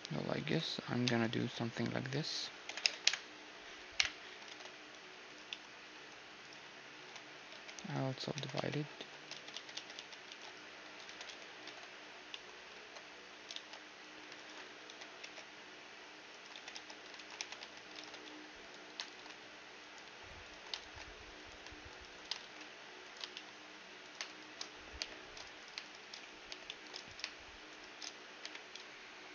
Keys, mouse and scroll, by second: 0.1 Tab, 0.1-3.6 right drag, 0.6 Tab, 1.0 Tab, 2.2 ctrl+l, 2.4 ctrl+i, 2.6 h, 3.6 KP_Divide, 4.1 ctrl+Tab, 5.1 middle click, 6.0-9.6 right drag, 6.6 w, 7.9 w, 8.9 ctrl+z, 9.1 ctrl+z, 9.3 ctrl+z, 9.6 ctrl+z, 9.9 ctrl+z, 10.4 a, 10.6 w, 11.9 ctrl+Tab, 11.9-13.6 middle drag, 12.3 ctrl+Tab, 13.1 ctrl+z, 13.9-15.8 right drag, 14.5 w, 15.9-18.6 right drag, 16.1 w, 17.0 w, 17.6 ctrl+Tab, 18.7 alt+shift+s, 20.1-23.4 right drag, 20.5 alt+shift+s, 22.0 alt+shift+s, 22.9-25.0 middle drag, 23.6-29.2 right drag, 24.6 j, 25.0 click, 26.1 j, 26.3-28.0 drag, 28.1 j.